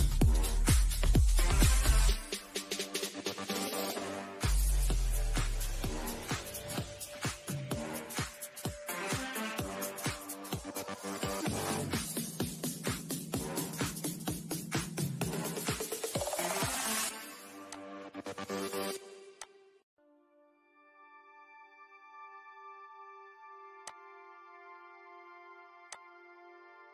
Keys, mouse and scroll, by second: 0.7 scroll up 1, 1.7 middle click, 2.5 scroll down 1, 2.8-5.8 middle drag, 5.8-16.6 shift+middle drag, 16.6 click, 16.7 click, 19.1 scroll down 1, 19.7-22.8 shift+middle drag, 22.8 click, 22.8 click.